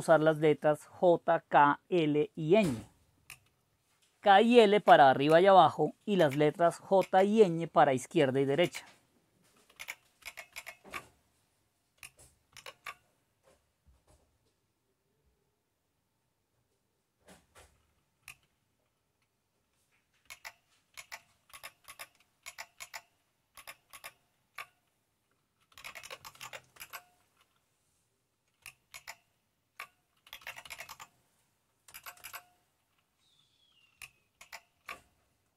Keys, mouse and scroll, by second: 6.2 super+k, 7.0 super+l, 8.6 super+k, 9.7 super+k, 10.2 super+l, 10.7 super+l, 12.5 super+e, 20.2 super+ñ, 21.1 super+ñ, 21.5 super+j, 21.9 super+j, 22.4 super+ñ, 22.8 super+ñ, 23.7 super+j, 25.5-26.9 typing, 29.1 super+ñ, 30.0-31.5 typing, 31.9 Return, 32.2 Return, 34.4 super+ñ, 34.7-35.4 typing.